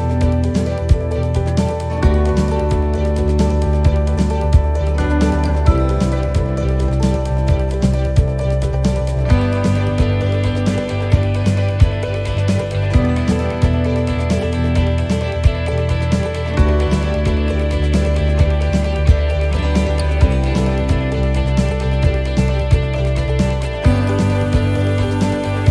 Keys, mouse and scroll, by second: 0.8 e, 2.0 click, 2.6 e, 4.1 click, 5.5 e, 11.8 middle click, 12.6 shift+middle click, 13.1-13.6 scroll down 8, 13.7 middle click, 14.3 shift+middle click, 15.4 click, 16.6 shift+middle click, 18.3 click, 19.3 middle click, 20.0 shift+middle click, 20.5 middle click, 21.4-22.0 scroll down 1, 22.5 click, 23.5 middle click, 24.0-24.6 scroll up 7, 24.8 shift+middle click, 25.4 middle click.